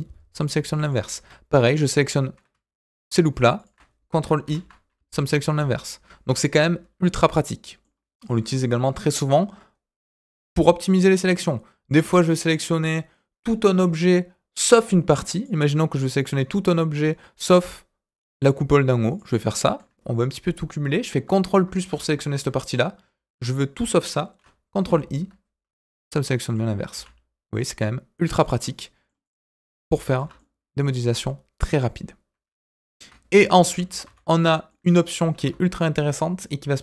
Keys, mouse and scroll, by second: 0.8 click, 1.8 alt+click, 2.7 alt+shift+click, 3.5 alt+shift+click, 4.4 ctrl+i, 5.4 s, 6.5-7.8 middle drag, 14.9 middle click, 15.3 click, 16.9 click, 19.1 click, 19.4 middle click, 21.5 ctrl+KP_Add, 21.9 ctrl+KP_Add, 24.8 ctrl+i, 26.0 middle click, 26.9 s, 28.6 middle click, 29.2 click, 29.4 middle click, 30.3-32.8 middle drag, 33.3 ctrl+z, 33.6 ctrl+z, 34.6 middle click, 35.3 alt+a.